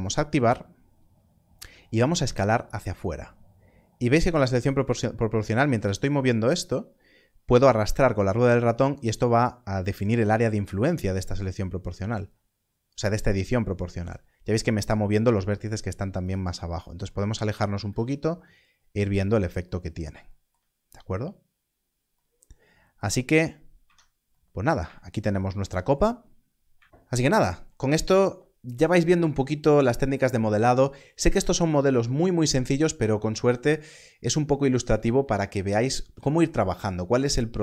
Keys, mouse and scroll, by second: 2.0 click, 3.8-4.7 scroll down 1, 4.7-6.8 scroll up 1, 6.9-7.6 scroll up 1, 8.1-8.9 scroll down 1, 8.9-9.5 scroll down 1, 10.0-11.8 scroll down 1, 11.8-13.4 scroll down 1, 16.2 click, 16.4-17.0 scroll down 1, 19.0 click, 23.7 Tab, 26.5 scroll down 1.